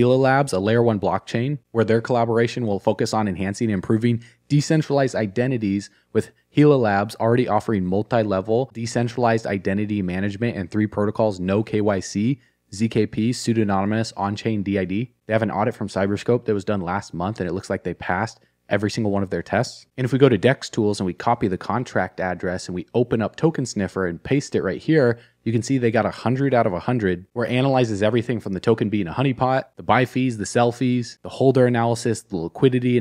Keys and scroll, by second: 15.2 alt+q, 22.4 alt+q.